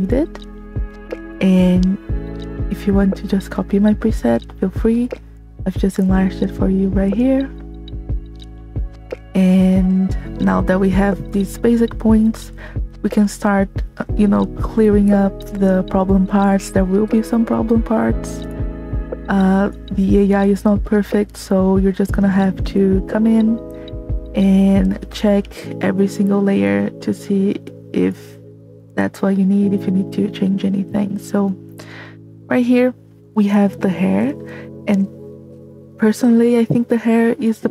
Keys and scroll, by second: 18.8 space.